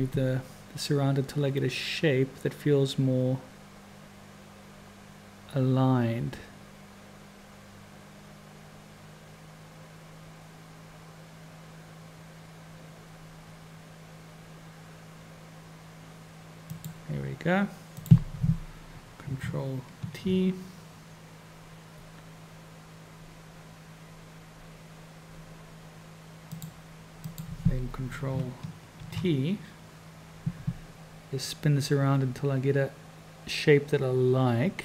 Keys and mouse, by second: 18.0 click, 20.2 ctrl+t, 27.2 click, 29.0 ctrl+t.